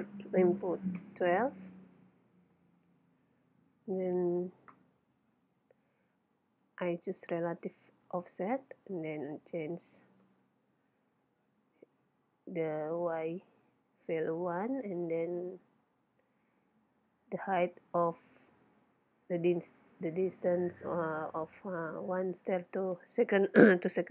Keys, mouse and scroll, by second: 2.8-4.4 drag, 8.7-10.5 drag, 14.6-16.4 drag.